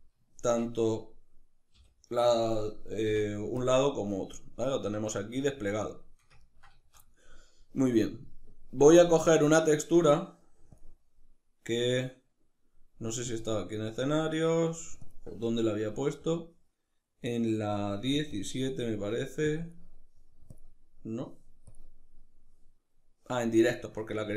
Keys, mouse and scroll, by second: 1.5 l, 5.2-8.6 shift+middle drag, 8.6 click.